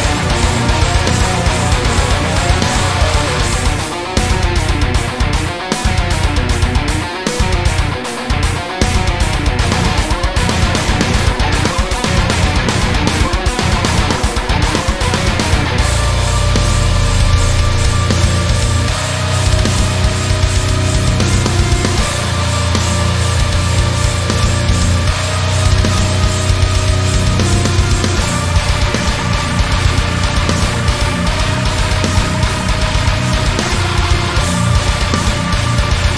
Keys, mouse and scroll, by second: 1.1 click, 1.6 click, 1.9 alt+shift+click, 2.3 g, 4.4 click, 4.8 click, 5.4 click, 5.7 alt+shift+click, 6.1 g, 7.9 click, 8.0 scroll down 1, 8.3-10.0 shift+middle drag, 9.2 scroll up 1, 10.0 click, 10.3 alt+shift+click, 10.9 g, 13.0 click, 13.4 ctrl+r, 14.1 Escape, 14.3 s, 15.0 KP_Enter, 15.5 g, 17.1 click, 17.3-17.6 scroll down 1, 17.7-19.3 shift+middle drag, 18.5 scroll up 1, 18.9 ctrl+r, 19.3 right click, 19.6 s, 20.6 KP_Enter, 21.0 g, 22.3 click, 22.7 Tab, 22.8 scroll down 1, 23.5 Tab, 23.7 scroll up 1, 24.1 ctrl+r, 24.7 right click, 24.9 g, 29.5 click, 29.9 ctrl+r, 30.4 right click, 30.8 ctrl+r, 32.4 click, 33.0 click, 33.3 alt+shift+click, 33.6 x, 34.6 ctrl+r.